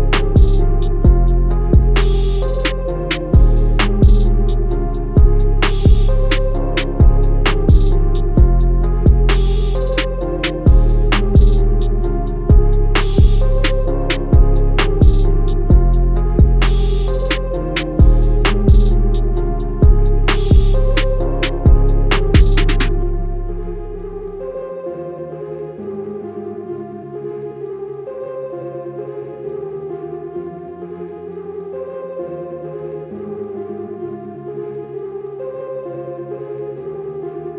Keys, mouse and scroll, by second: 3.4 click, 4.4 scroll down 1, 4.5 click, 4.7 scroll up 1, 4.8 click, 6.0 scroll down 1, 6.1-6.5 alt+scroll up 2, 7.3 click, 8.5 scroll down 1, 9.1 click, 11.5 scroll up 1, 11.7 click, 11.9 alt+scroll down 1, 12.0 scroll up 1, 12.3 click, 13.6 scroll down 1, 14.1 click, 16.2 ctrl+z, 16.3 click, 17.4-17.7 scroll down 1, 17.7 click, 18.2 scroll up 1, 18.3 click, 18.7 z, 19.0 click, 19.6 scroll up 1, 19.9 Escape, 20.3 click, 20.6 z, 20.8 Escape, 21.3 click, 22.0 Escape, 22.2 click, 22.7 Left, 22.9 Down, 23.1 Left, 23.2 click, 23.4 scroll down 1, 23.9 scroll up 1, 24.0 click, 24.2 click, 24.7 click, 25.3 Right, 25.5 Down, 25.6 click, 25.8 alt+scroll down 1, 25.9 alt+scroll up 1, 26.3 click, 27.1 Down, 27.2 Left, 27.5 alt+scroll down 2, 27.8 scroll up 1, 27.9 click, 31.9-32.3 alt+scroll down 2, 32.8 alt+scroll up 1, 33.1 click, 33.8 Escape, 34.1 alt+scroll down 1, 34.1 alt+scroll up 1, 34.3 click, 34.8 Escape, 34.9 alt+scroll down 2, 35.1 click, 36.6 click.